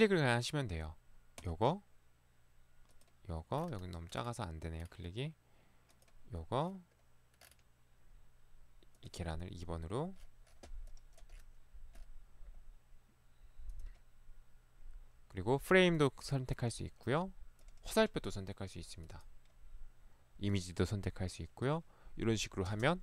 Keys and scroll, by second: 22.8 space.